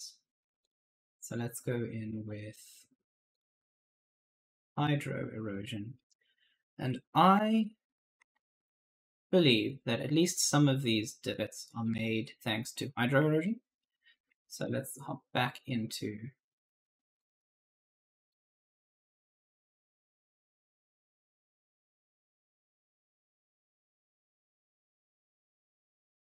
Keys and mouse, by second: 0.5 click, 3.2 click, 4.9 right click, 7.3 alt+Tab, 8.1 alt+Tab, 13.2 alt+Tab, 13.6 right click, 13.7-15.8 typing, 14.2 alt+Tab, 14.9 right click, 17.0 click, 19.1 click, 23.5-24.5 typing, 23.6 right click, 24.9 click.